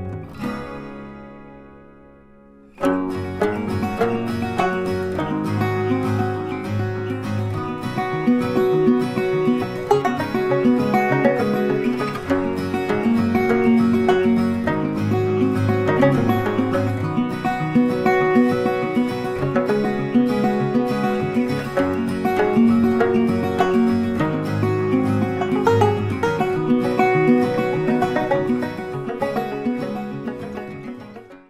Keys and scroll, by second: 4.4 ctrl+t.